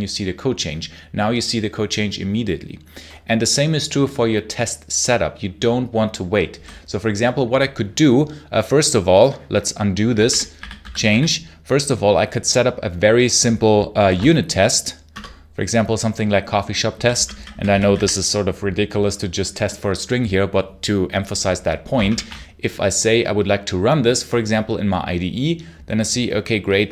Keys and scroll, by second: 9.7-11.4 typing, 13.8 ctrl+shift+t, 15.0 Return, 16.8 j, 17.8 w, 21.9 ctrl+shift+F10.